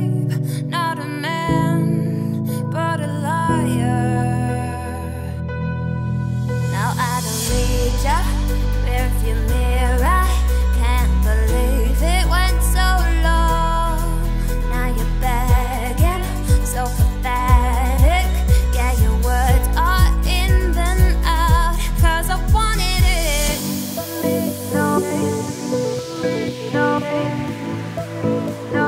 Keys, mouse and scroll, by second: 1.4-2.3 scroll down 13, 1.9 z, 2.3 middle click, 3.0 Tab, 3.3-4.2 middle drag, 4.2 click, 4.5-4.8 scroll down 3, 4.8 middle drag, 5.1-5.6 scroll up 5, 5.6 click, 5.8 Tab, 5.9 middle click, 6.5 click, 6.8 click, 7.3 scroll down 2, 8.0 shift+click, 8.3 middle click, 8.5-8.9 scroll up 3, 8.9 shift+middle click, 9.5 ctrl+b, 10.6 Tab, 10.7 scroll down 3, 10.9-12.7 middle drag, 12.7 click, 12.9-13.6 middle drag, 13.6 Tab, 13.8-14.2 scroll up 2, 14.2 click, 14.4 middle click, 15.3 shift+click, 15.7 middle click, 16.1 ctrl+b, 17.7 Tab, 17.8 scroll down 2, 17.9-18.7 middle drag, 18.7 ctrl+z, 18.9 ctrl+z, 19.4 Tab, 19.5 click, 19.7 scroll down 1, 19.7-21.1 middle drag, 21.1-21.4 scroll down 5, 21.4-22.2 middle drag, 22.2-22.9 scroll up 2, 22.9-24.9 shift+middle drag, 24.9 ctrl+s, 25.1-25.5 scroll down 4, 25.5-25.9 scroll up 2, 25.9 `, 26.5-26.9 scroll up 3, 26.9-28.8 shift+middle drag.